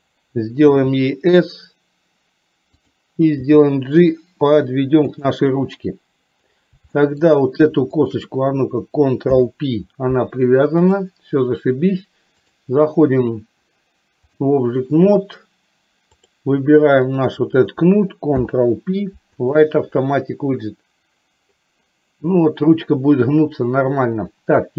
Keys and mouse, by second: 0.8 s, 6.9 shift+middle click, 8.1 shift+click, 9.4 ctrl+p, 10.8 click, 12.6-14.4 drag, 16.2 click, 18.5 ctrl+p.